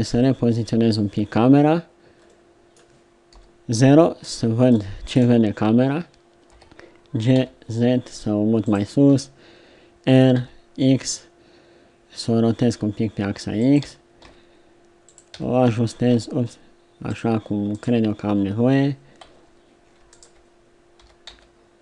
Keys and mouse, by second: 2.5 middle click, 3.3 KP_0, 4.2 middle click, 6.5 g, 9.1 r, 13.8 g, 15.3 r, 17.7-21.0 right drag, 21.0 r.